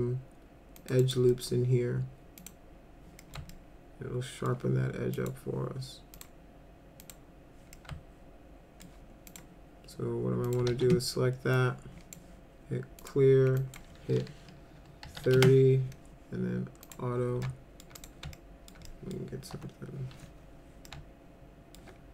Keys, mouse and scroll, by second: 0.8 click, 1.0 right click, 1.3 middle click, 2.4 click, 3.2 middle click, 3.5 alt+middle click, 5.2 click, 6.2 click, 7.0 click, 7.8-8.8 alt+middle drag, 9.3 click, 10.5 click, 10.7 ctrl+a, 11.5-12.2 drag, 13.0 click, 13.6 click, 14.8-15.7 typing, 16.8 click, 17.4-17.8 alt+middle drag, 18.0 click, 18.3 alt+middle click, 18.9 middle drag, 19.6 F4, 20.9 alt+middle click.